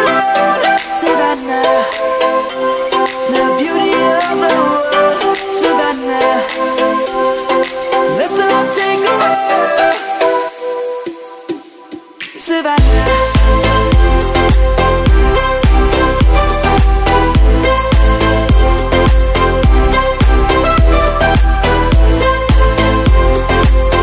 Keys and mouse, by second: 2.9 ctrl+b, 7.2 click, 8.9 click, 9.6 shift+click, 11.2 ctrl+-, 12.8 middle click, 13.8 click, 15.0 click, 15.7 Tab, 16.2 click, 17.7 ctrl+a, 18.9 Tab, 19.3 click, 20.5 3, 20.8 click.